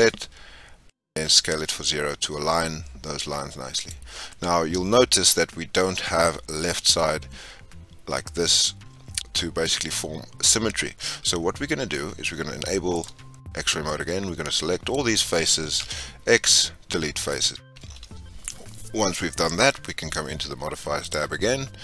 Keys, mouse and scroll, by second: 12.9 click, 15.7 x, 18.0-18.9 scroll up 3.